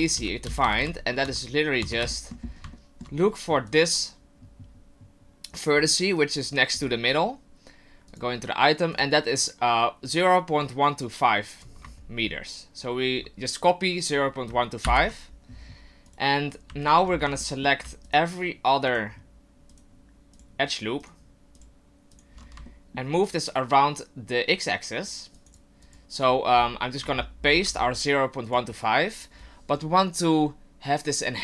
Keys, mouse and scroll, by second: 0.1-0.8 ctrl+z, 1.2 Tab, 1.8 Tab, 2.1 shift+middle click, 2.4-2.7 scroll up 4, 2.7 shift+middle click, 3.2-3.7 scroll up 1, 3.7 right click, 5.7 scroll down 2, 8.1 click, 8.9 click, 16.8 alt+right click, 17.1-17.4 scroll down 4, 17.4 shift+middle click, 18.0 alt+shift+right click, 18.9 alt+right click, 19.8 alt+right click, 20.3 alt+shift+right click, 21.1 alt+shift+right click, 21.6 alt+shift+right click, 22.1 alt+shift+right click, 22.7 shift+middle click, 24.5 click, 25.8 click.